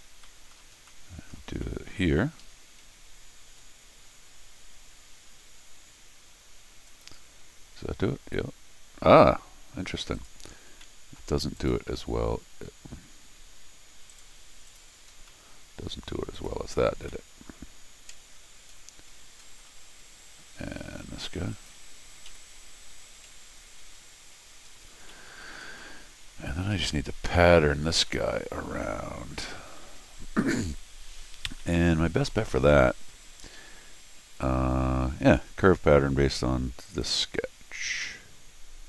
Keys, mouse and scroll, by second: 0.0 scroll down 2, 0.2 middle click, 0.9 middle click, 1.5 middle click, 2.2 scroll down 1, 2.4 Escape, 3.5 u, 6.9 click, 10.1 click, 10.8 middle click, 10.8 scroll, 11.6 click, 14.1 right click, 14.7 click, 15.2 scroll down 1, 15.3 middle click, 16.3 click, 17.1 middle click, 18.7-19.1 scroll up 2, 19.4-21.5 scroll down 4, 21.5 click, 22.3 u, 24.7 scroll down 2, 25.1 middle click, 25.7 scroll down 2, 25.8 middle click, 26.7 middle click, 27.1-27.6 scroll up 2, 28.1 middle click, 31.6 middle click, 33.5 Escape, 36.8 click, 38.0 scroll down 2.